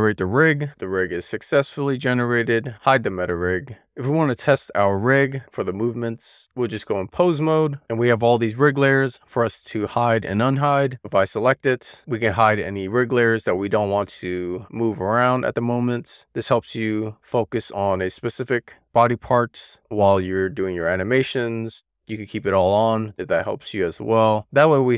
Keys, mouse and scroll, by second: 2.6 click, 3.4 click, 5.5 click, 6.2-7.1 scroll up 1, 7.1 click, 9.5-9.9 scroll up 1, 10.1-10.9 scroll down 1, 11.3 click, 12.5 click, 22.2 click, 23.6 click, 24.4 click.